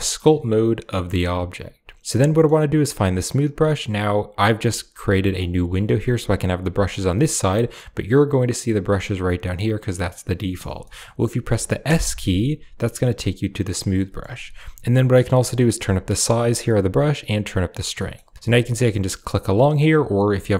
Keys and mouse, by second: 0.0-1.5 drag, 2.0 middle click, 2.0 middle click, 6.9 click, 8.4 click, 9.4 click, 10.7 middle click, 11.7 s, 13.8 middle click, 15.5 click, 17.2 click, 17.9 middle click, 18.5 click, 18.9 click, 19.2 click, 19.5 middle click, 20.2 click.